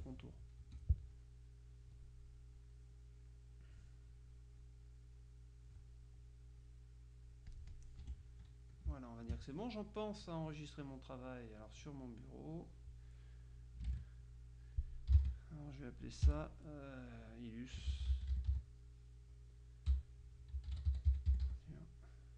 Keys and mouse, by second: 0.7 F2, 1.2-2.4 drag, 2.6-4.2 drag, 4.7-6.2 drag, 6.7-8.4 drag, 8.1 F1, 9.0 space, 10.3 click, 11.7 click, 13.7 click, 13.9 KP_1, 14.4 KP_4, 15.2 d, 17.8-19.1 typing, 20.4-22.3 typing.